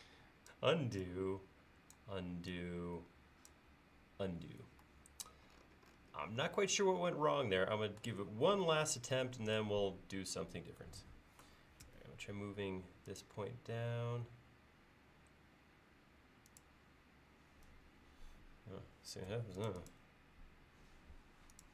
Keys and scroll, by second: 11.9 m.